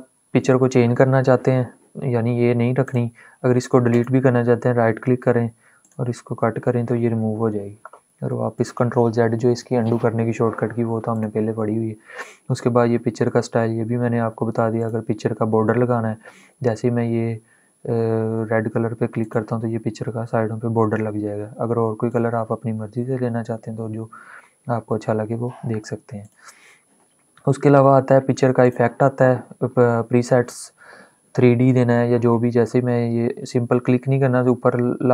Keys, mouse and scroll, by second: 3.6 right click, 5.6 click, 10.8 click, 14.5 click, 18.9 click, 21.7 click, 21.9 click, 26.0 click, 28.3 click.